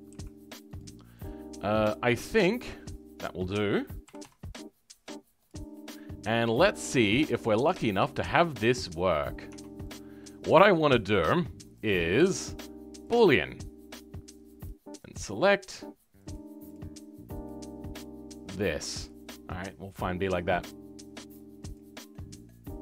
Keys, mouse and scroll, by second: 0.9 scroll down 2, 1.1 middle click, 1.9-2.4 scroll down 1, 2.4 shift+middle click, 2.8-3.1 scroll up 2, 3.1 middle click, 4.1 s, 5.7 middle click, 6.6-7.0 scroll down 2, 7.0 middle click, 7.5-8.4 scroll up 2, 8.4 click, 10.1-13.1 middle drag, 13.1-22.8 drag.